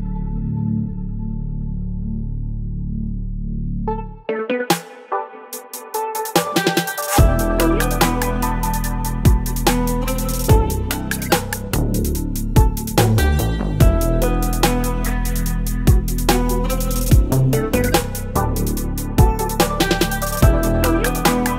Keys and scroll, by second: 0.4 space, 8.8 ctrl+BackSpace, 9.1 ctrl+d, 9.3 ctrl+space, 14.5 Delete, 15.4 ctrl+d, 18.1 space, 21.4 Delete.